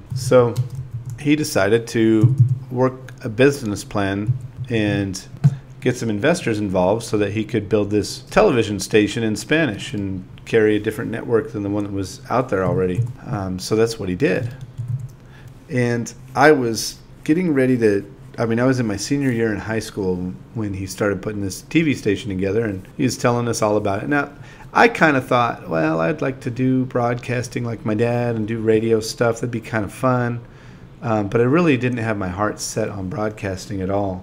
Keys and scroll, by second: 3.9 5, 4.9 5, 5.5 space, 7.7-10.8 typing, 11.0 super+v, 12.2-14.2 typing, 16.1 5, 20.8-23.7 typing, 23.9 super+a, 25.8 space, 26.3 space, 27.8 Up, 29.8-33.0 typing, 34.1 4.